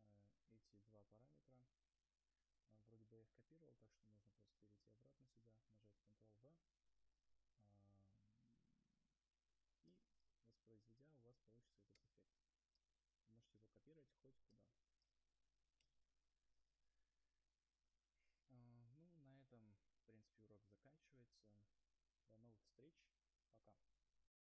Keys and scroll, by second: 0.7 y, 1.3 u, 7.7 ctrl+v, 12.4 0.